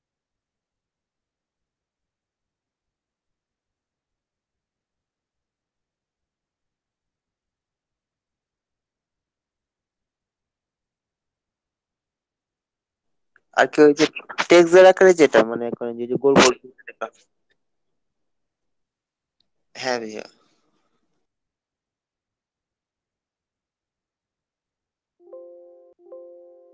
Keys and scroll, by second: 0.9-3.4 typing, 3.7 Return, 22.1 space, 22.8 ctrl+space, 23.3 ctrl+space, 24.0 ctrl+space, 24.4 ctrl+v.